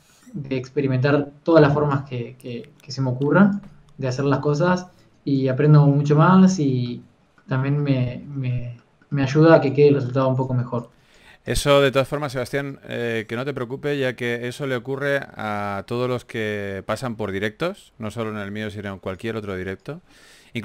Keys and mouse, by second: 1.1 f, 2.6-8.2 drag, 4.4 f, 8.2 f, 11.2-17.4 drag, 11.2 f, 14.9 f, 18.4 f.